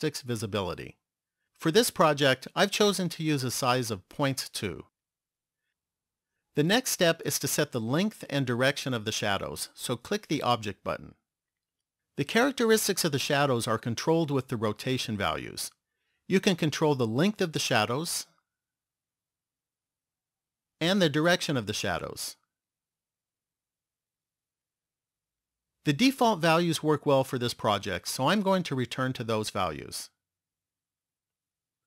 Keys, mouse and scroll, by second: 3.1 click, 11.5 click, 16.7 click, 21.0 click, 27.9 ctrl+z, 28.9 ctrl+z.